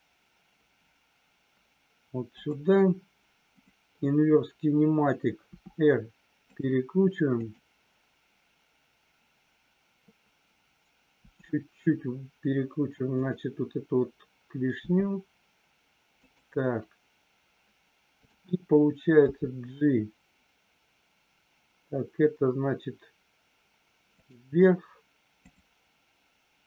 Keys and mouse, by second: 2.2 click, 5.5 r, 6.5 click, 7.4 click, 11.1 r, 13.1 click, 14.8 g, 16.1 click.